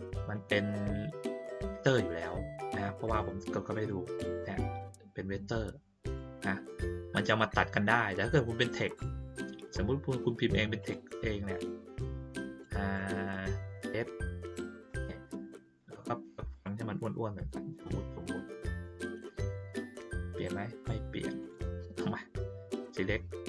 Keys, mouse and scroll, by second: 3.7 click, 6.0 click, 8.3 middle click, 9.3 middle click, 10.8 click, 11.5 click, 16.5 click, 18.7 click, 21.4 click.